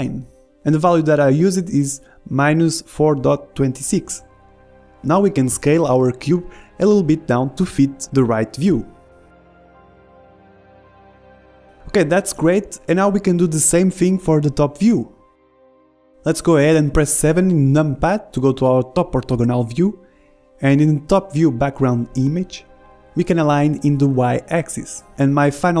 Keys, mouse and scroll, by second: 2.3 BackSpace, 4.1 click, 7.0-8.1 middle drag, 8.1 s, 12.5-15.8 middle drag, 16.9 KP_7, 18.7 middle click, 20.4 middle click, 23.2-25.8 drag.